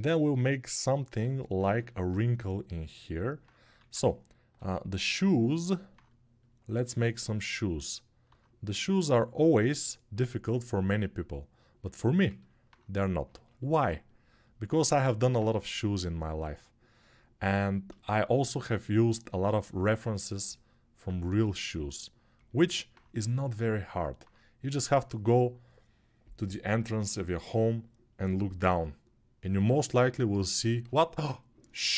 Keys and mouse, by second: 4.3 g.